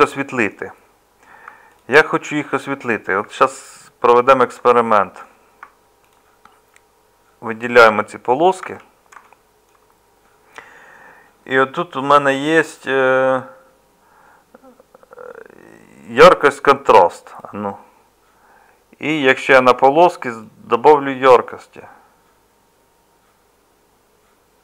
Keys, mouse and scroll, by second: 8.6 Tab.